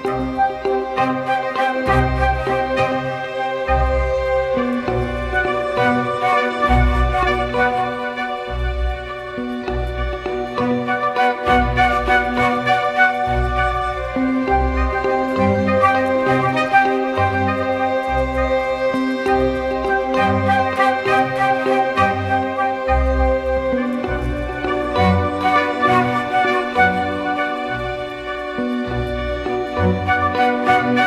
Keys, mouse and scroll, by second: 16.4 double click, 25.4 double click.